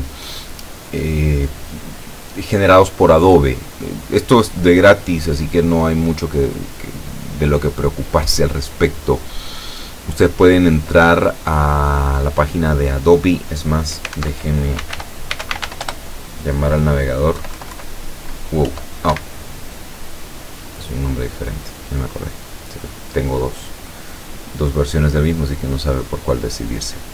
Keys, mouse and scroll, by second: 14.3 alt+F2, 14.6-16.2 typing, 17.5 BackSpace, 18.7 End, 19.2 Escape.